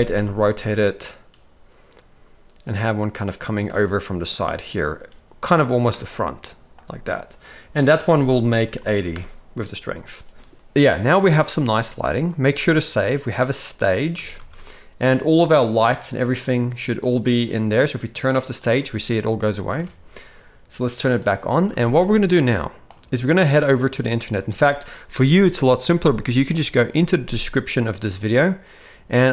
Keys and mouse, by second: 5.9-6.7 middle drag, 7.9-9.1 drag, 12.1 z, 14.2 ctrl+s, 14.4 ctrl+s, 15.3 click, 18.5 click, 19.7 alt+a, 21.1 click, 21.6 ctrl+s, 21.8 ctrl+s, 21.9 ctrl+s, 22.4-22.8 shift+middle drag.